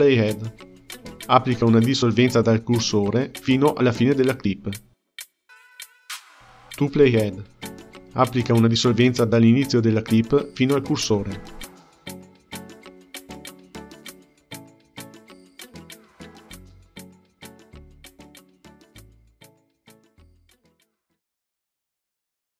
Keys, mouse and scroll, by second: 0.0-3.0 right drag, 4.4 ctrl+z, 5.2-8.2 right drag.